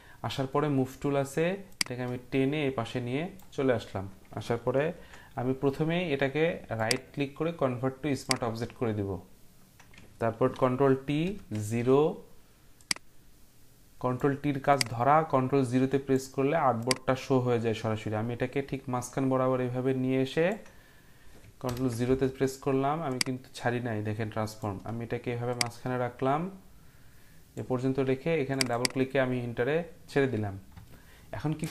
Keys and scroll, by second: 10.4 ctrl+t, 11.2 ctrl+0, 21.6 ctrl+0.